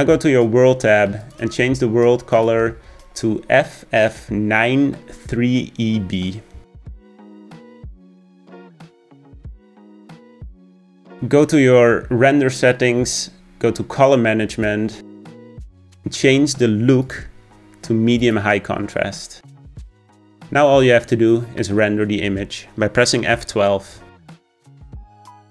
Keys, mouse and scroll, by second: 2.2 click, 3.9 click, 10.6 click, 19.4 click.